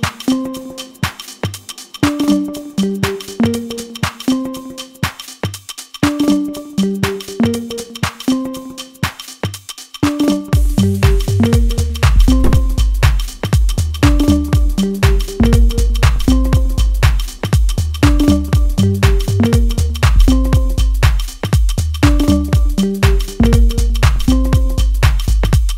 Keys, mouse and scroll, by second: 7.2 scroll up 1, 7.5-10.5 middle drag, 10.6-20.9 drag, 21.0 middle click, 22.2 click, 22.8-23.2 scroll up 1, 23.2-24.9 middle drag, 24.9-25.7 drag.